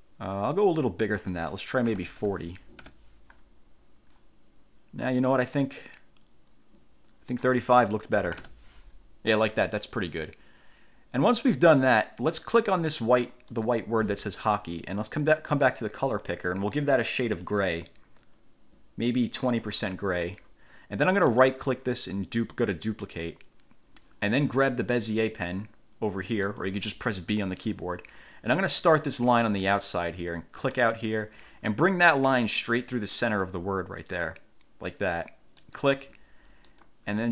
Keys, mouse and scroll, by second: 1.0 click, 2.0 4, 3.0 Return, 5.4-7.8 drag, 8.1-9.0 typing, 13.6 click, 15.4-16.7 drag, 17.6 click, 21.5 right click, 23.2 click, 26.6 click, 30.8 click, 35.8 click, 36.8 click.